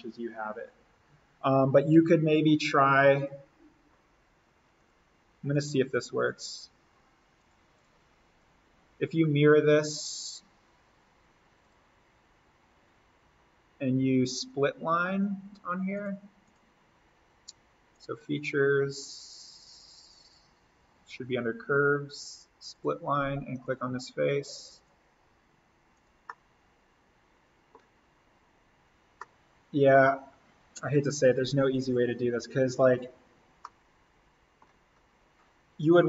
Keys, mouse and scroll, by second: 1.8 l, 3.1 click, 5.4 Escape, 6.1-12.2 drag, 15.9 click, 22.0 click, 26.2-28.0 middle drag, 28.0 scroll down 1, 29.1 middle click, 30.2-31.0 scroll up 1, 33.6 middle click, 34.7-36.0 scroll up 1.